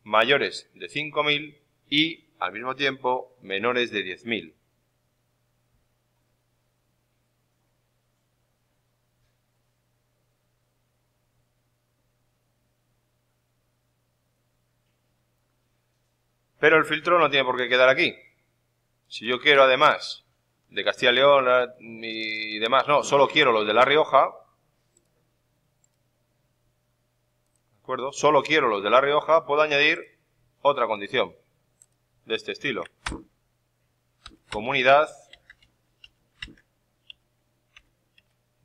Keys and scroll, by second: 32.9 ctrl+Up, 34.2 ctrl+c, 34.4 Down, 35.5 Right, 36.3 ctrl+Down, 37.3 Up.